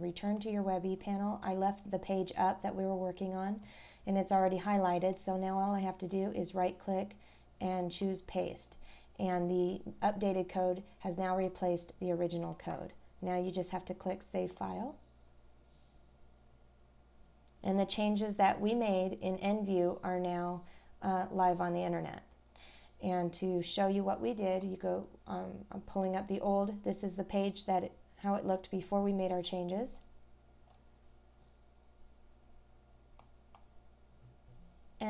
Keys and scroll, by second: 12.4-12.7 scroll down 1, 29.5 scroll down 1, 30.0 scroll up 1.